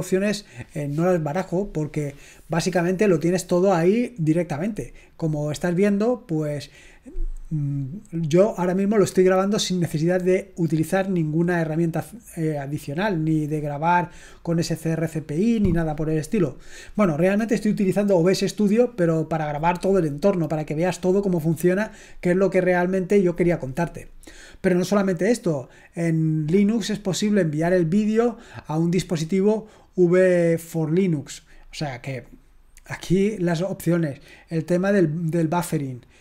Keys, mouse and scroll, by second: 25.4-26.0 scroll down 1, 28.2-28.7 scroll down 1, 31.4-32.1 scroll down 1, 32.6-34.3 scroll down 2, 36.0-36.2 scroll down 3.